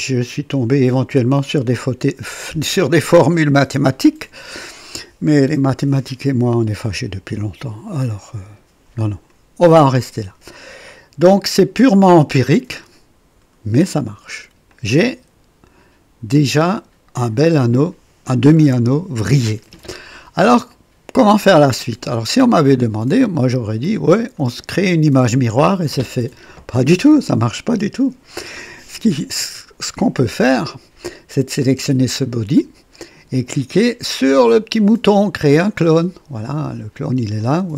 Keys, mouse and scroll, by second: 3.3-9.4 drag, 10.8-13.0 drag, 13.8 click, 14.7-17.5 drag, 19.8-20.6 drag, 20.7-21.8 drag, 22.0 right click, 23.8 click, 24.3 right click, 31.5 click, 35.6 click, 37.4 click.